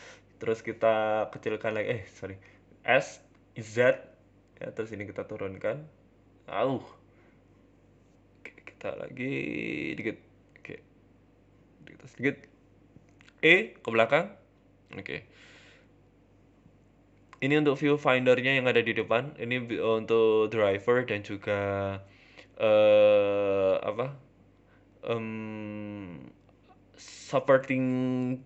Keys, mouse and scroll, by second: 0.1 s, 1.7 ctrl+z, 2.2 s, 3.9 g, 5.8 a, 5.8 s, 6.7 ctrl+z, 7.1 s, 8.3 s, 10.1 g, 10.1 z, 11.0 g, 12.5 middle click, 12.6 middle click, 12.9 middle click, 13.5 e, 14.9 Tab, 15.1 scroll down 3, 15.3 middle click, 15.9 s, 16.7 s, 17.9 s, 18.6 KP_7, 19.0 scroll up 3, 19.2 shift+middle click, 19.6 r, 20.5 z, 21.1 shift+middle click, 21.8 g, 22.7 middle click, 23.3 scroll down 3, 23.5 middle click, 23.8 scroll up 2, 23.9 shift+middle click, 24.4 g, 26.0 KP_Decimal, 26.2 z, 26.5 z, 27.6 g.